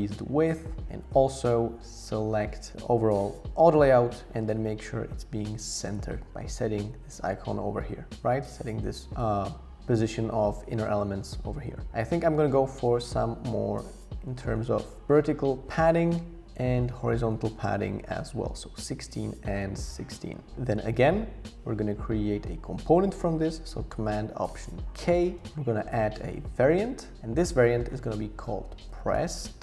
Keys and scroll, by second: 13.8 Up, 14.3 Up, 14.5 Page_Up, 15.0 Page_Down, 16.9 Page_Up, 17.0 Page_Up, 17.2 Page_Up, 17.3 Page_Up, 17.5 Page_Up, 25.0 alt+super+k.